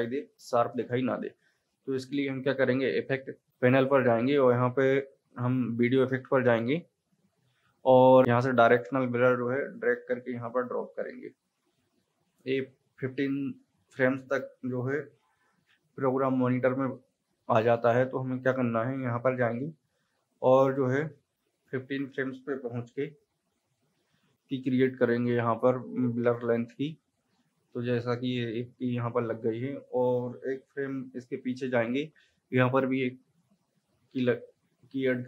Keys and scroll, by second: 0.3 space, 15.0 =, 31.3 Left.